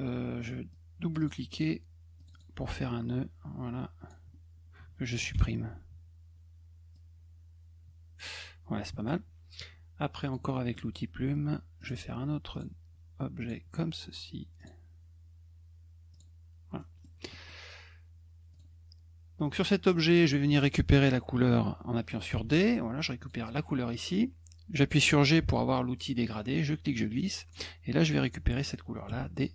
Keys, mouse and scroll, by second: 0.7 click, 1.2 click, 2.2 click, 2.3 click, 2.8-4.1 drag, 6.9-8.2 drag, 8.8 middle click, 10.2 click, 10.5 middle click, 11.8 click, 12.5 click, 13.4 click, 14.6 click, 16.1 click, 16.8 middle click, 17.3 middle click, 18.5 click, 19.4 click, 19.9 middle click, 23.2 click, 25.4 g, 26.2-27.5 drag.